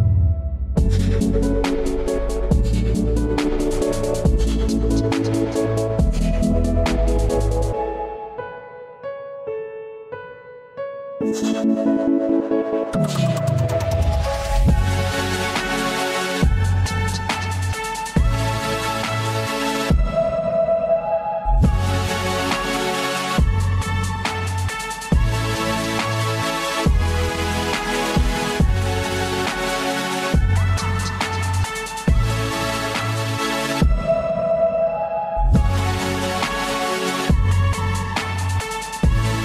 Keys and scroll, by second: 7.3 l, 8.9 Down, 11.1 Up, 12.4 Return, 36.9 ctrl+z, 38.6 Delete.